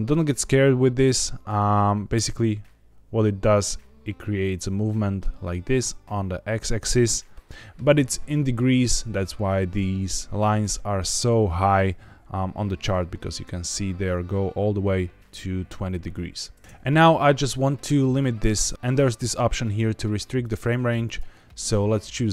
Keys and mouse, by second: 2.1 space, 16.6 space, 20.3 click, 20.9 click.